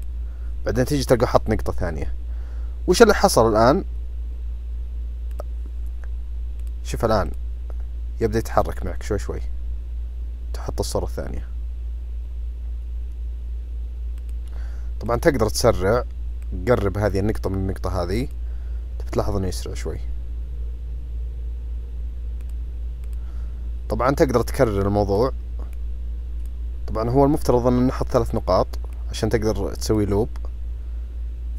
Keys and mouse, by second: 5.3 click, 6.5 click, 7.3 click, 15.0 drag, 15.5 drag, 16.4-17.4 drag, 18.2 click, 22.4 click, 23.0 click, 24.6-25.2 drag, 25.7 click, 28.3-30.0 drag.